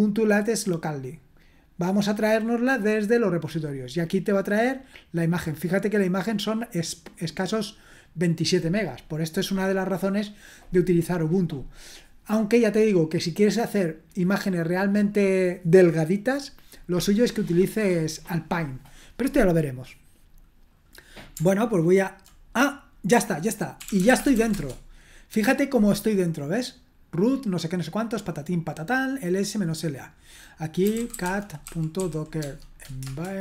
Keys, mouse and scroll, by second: 6.8-8.9 drag, 23.6-24.8 typing, 27.1-29.5 drag, 29.8 click, 30.4 click, 30.6-33.0 typing.